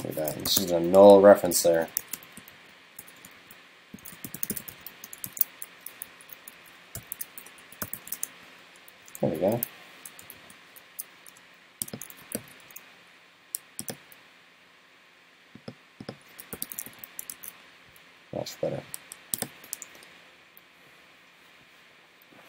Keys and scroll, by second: 5.3 super+s, 6.2 alt+Left, 6.6 alt+Left, 9.1 super+Right, 12.4 super+c, 16.9 super+v, 17.4 super+s, 18.5 super+s.